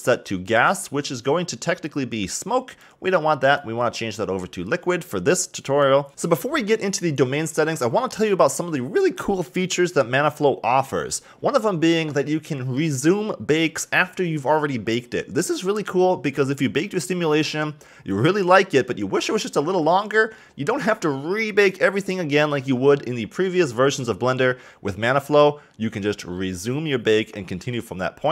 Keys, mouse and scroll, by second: 6.1-7.6 scroll up 6, 24.4-27.4 scroll down 1.